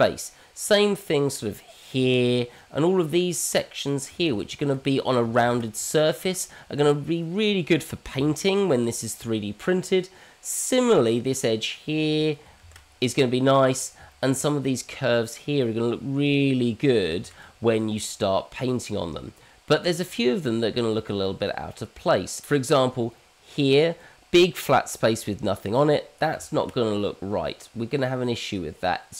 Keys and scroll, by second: 4.3 ctrl+z, 5.6 ctrl+z, 12.6 ctrl+z, 17.2 ctrl+z, 22.9 ctrl+z, 23.2 Escape, 26.3 ctrl+z.